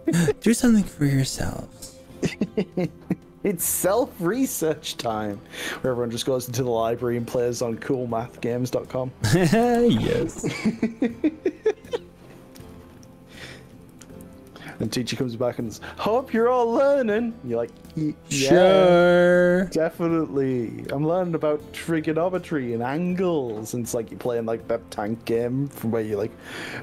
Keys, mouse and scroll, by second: 0.6 g, 1.7-2.2 scroll up 4, 4.1 click, 4.7 click, 6.9-7.3 drag, 8.4 click, 9.7 g, 13.1 click, 13.9 g, 14.9 click, 15.5 click, 16.1 g, 16.9 click, 17.7 click, 17.9 g, 20.7 click, 22.1 click, 23.1 g, 24.3 click, 25.1 click, 25.3 g, 26.1 click, 26.5 g.